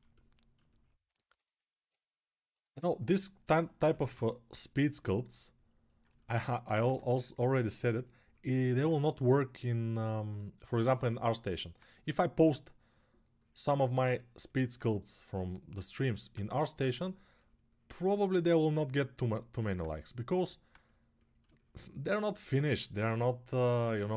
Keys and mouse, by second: 1.1-5.8 ctrl+alt+right drag, 3.2 g, 3.6 ], 3.7 ], 5.8-7.0 alt+shift+drag, 6.6 2, 11.5-16.9 drag, 16.9-24.1 right drag.